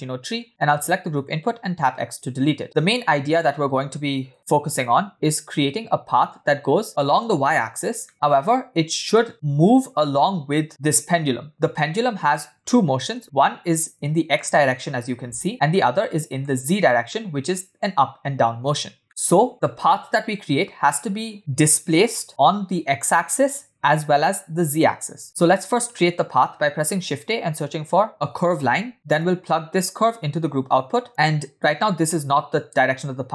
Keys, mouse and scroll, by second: 0.4 scroll up 6, 0.5 click, 1.8 x, 2.7-4.4 middle drag, 4.8 scroll down 2, 8.0-8.5 middle drag, 11.5-12.3 middle drag, 13.2 space, 15.7-16.5 middle drag, 17.1-17.9 middle drag, 19.0 middle click, 19.3 space, 19.5 scroll down 1, 26.4 shift+a, 29.9-31.1 drag, 31.2-31.6 middle drag, 31.6-33.0 scroll up 1, 33.0 scroll up 2.